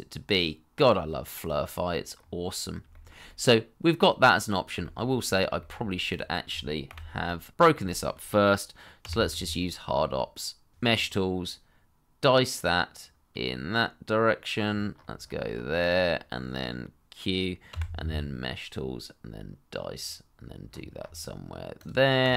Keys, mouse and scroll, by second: 2.1-2.8 scroll up 1, 2.9 shift+middle click, 3.2 middle click, 4.8 shift+middle click, 5.5 shift+middle click, 6.6 Delete, 7.5-7.9 scroll up 1, 7.9 middle click, 9.3 q, 14.5-15.4 scroll up 1, 17.7 q, 20.6-21.4 scroll up 1, 21.4-22.2 scroll down 1, 22.2 double click.